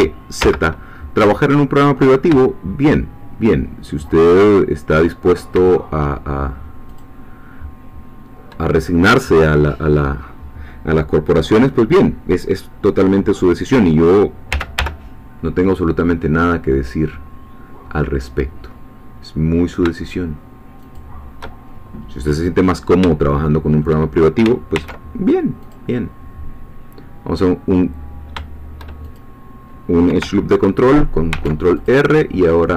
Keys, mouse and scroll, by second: 0.4 z, 4.5 shift+click, 6.9 shift+click, 14.5 e, 14.8 y, 20.8 shift+click, 22.4-22.7 scroll up 2, 23.3 shift+middle click, 24.7 ctrl+r, 25.6 click, 29.0 shift+click, 31.3 ctrl+r, 31.8 ctrl+click.